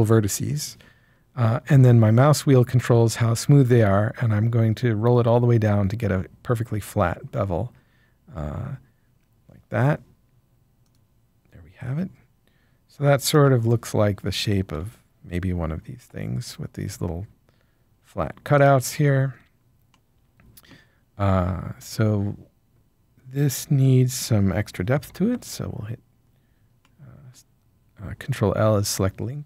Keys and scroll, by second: 25.0 ctrl+l.